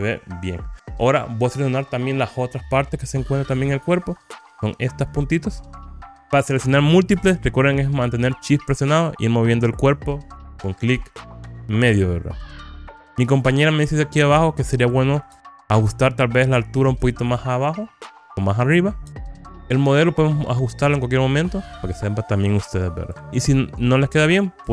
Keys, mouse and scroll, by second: 3.4 scroll up 2, 4.7 click, 6.2 shift+click, 7.7 shift+click, 8.2 shift+click, 9.0 middle click, 12.8 shift+click, 13.6-15.1 middle drag, 16.5 shift+click, 17.6-18.7 middle drag, 21.5 shift+click, 22.5 middle click, 24.4 shift+click.